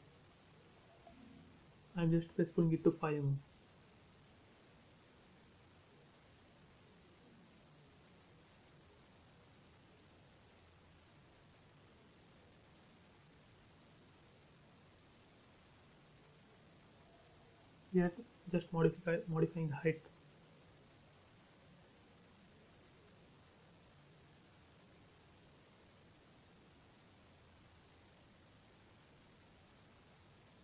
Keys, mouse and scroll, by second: 0.9-1.9 typing, 1.7 Return, 2.6-3.2 scroll down 1, 3.4 middle click, 4.5-4.9 scroll up 1, 6.9 p, 7.1 click, 8.7-9.2 typing, 9.6 Return, 10.7 click, 12.5-13.7 typing, 13.3 Return, 14.2 click, 15.1 p, 15.1 click, 17.7-19.8 typing, 18.6 Return, 20.0 click, 22.0-23.1 typing, 22.8 Return, 23.6-24.0 scroll down 1, 24.7 scroll up 1, 25.1 middle click, 26.3 f, 27.0 space, 27.2-28.9 scroll down 1, 29.7 click, 29.8 click, 29.8 space, 30.5 scroll up 1.